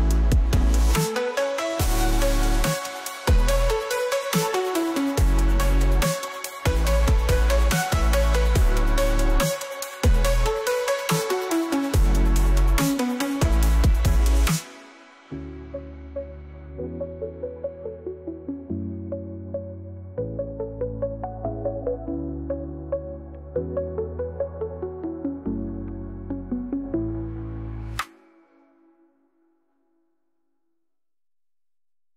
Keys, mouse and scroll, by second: 3.2-4.2 drag, 7.9 ctrl+Tab, 9.6 click, 10.5 space, 12.0 click, 12.9 click, 13.3 click, 16.5 space, 22.7 space, 23.9 click.